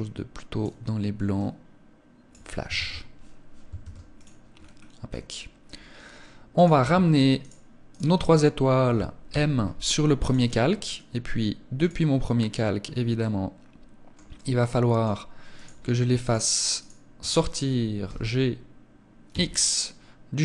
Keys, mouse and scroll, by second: 3.1 ctrl+s, 3.8-4.1 scroll down 5, 4.9-5.3 scroll up 4, 5.9 right click, 7.2 right click, 8.6 m, 11.1 click, 11.7-12.5 scroll down 2, 12.1-12.7 scroll up 3, 12.5 middle click, 13.7 middle click, 14.9 right click, 15.6 shift+right click, 16.1 right click, 17.3 g, 19.9 click, 20.1 middle click.